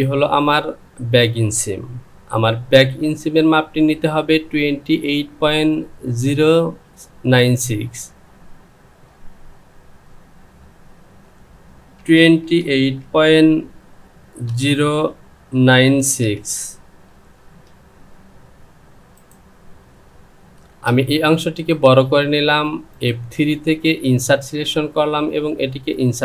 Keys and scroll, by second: 3.1 Down, 12.0 KP_2, 14.5 KP_0, 17.4 Return, 20.7 Return.